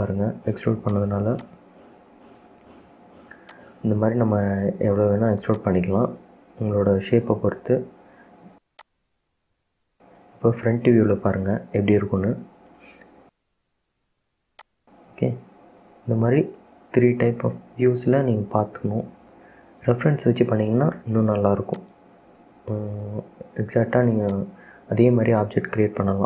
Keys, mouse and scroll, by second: 1.5 click, 2.7 e, 5.1 e, 6.1 scroll down 2, 6.4-8.6 middle drag, 8.6 Tab, 8.9 click, 9.3 scroll down 2, 9.6-11.0 middle drag, 11.0 scroll up 1, 12.0 KP_1, 14.7 click, 16.5 KP_3, 18.3 KP_7, 22.0 click, 22.6 scroll down 2, 22.8-24.0 middle drag, 24.0-24.4 scroll up 2, 24.4 click, 24.7-25.1 scroll up 3, 25.1 scroll down 2, 25.4-26.2 middle drag.